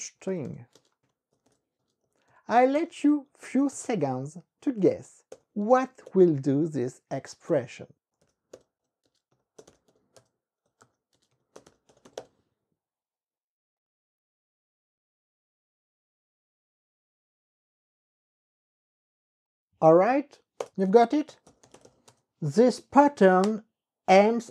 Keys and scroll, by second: 0.0-3.2 typing, 4.1 KP_Subtract, 4.3 z, 4.8 alt+), 5.1 KP_Add, 5.4 ), 5.7 space, 6.5 KP_1, 7.9-12.8 typing, 20.7 Return, 21.1-22.7 typing, 23.5 KP_Enter.